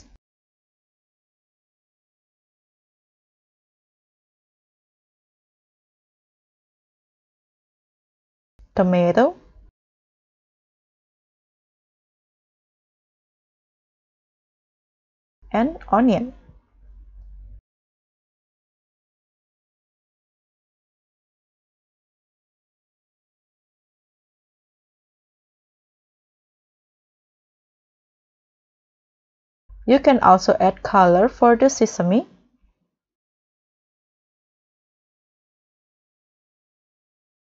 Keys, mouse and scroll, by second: 0.3 double click, 1.3-2.2 typing, 2.4 Return, 8.8 double click, 9.5-10.5 typing, 17.7 double click, 18.2-18.7 typing, 30.0 scroll down 1, 34.2 double click, 34.9-35.6 typing.